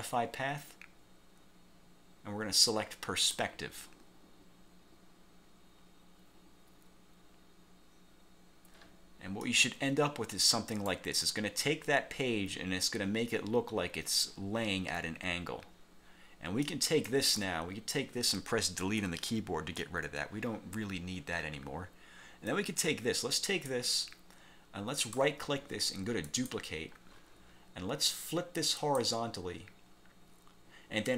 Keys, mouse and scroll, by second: 3.3 click, 9.6-11.2 drag, 16.8 click, 17.5 click, 19.1 Delete, 22.6-24.0 drag, 25.1 click, 26.4 click, 28.9 click.